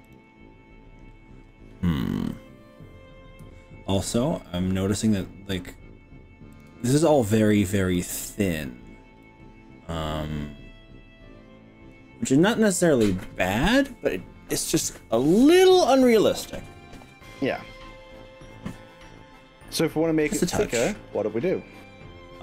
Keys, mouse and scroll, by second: 0.1 click, 3.5 x, 6.7 x, 7.0-7.9 scroll down 4, 7.9-8.9 middle drag, 9.3-10.4 middle drag, 10.5-12.8 middle drag, 20.9 scroll up 1, 21.5 scroll up 1.